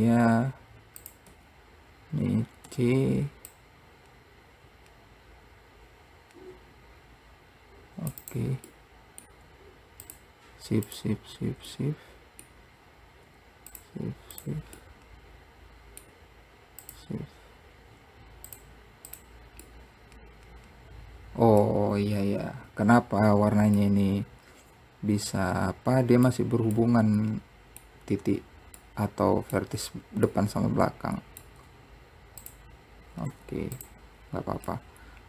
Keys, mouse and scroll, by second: 0.8-1.2 scroll up 1, 1.2 click, 8.9-10.2 middle drag, 10.2 shift+click, 11.1 shift+click, 11.9-13.9 middle drag, 13.9 shift+click, 14.5 shift+click, 15.0-17.0 middle drag, 17.0 shift+click, 18.6 click, 19.2 click, 19.9-22.2 middle drag, 22.2-23.1 scroll up 1, 23.1 scroll down 1, 24.0-32.6 middle drag, 32.6 shift+click, 33.5 `, 34.4-34.9 scroll down 3, 34.9-35.2 middle drag.